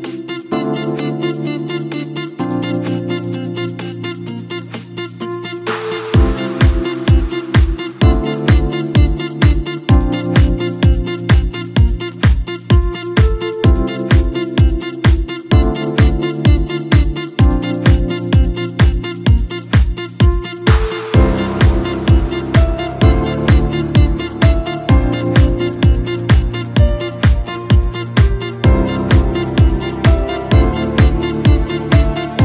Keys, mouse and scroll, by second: 4.3 click, 4.4 click, 6.8 shift+click, 7.9 shift+click, 8.8 shift+click, 8.9 shift+click, 10.1-11.4 middle drag, 11.4-12.4 scroll up 1, 12.4 shift+click, 12.6 shift+click, 13.5-16.6 middle drag, 17.7 shift+click, 19.2 shift+click, 20.0 shift+click, 20.1 shift+click, 21.2-23.4 middle drag, 23.4 shift+click, 24.4-26.6 middle drag, 26.6-28.7 drag, 28.7-31.6 middle drag, 31.6-32.4 drag.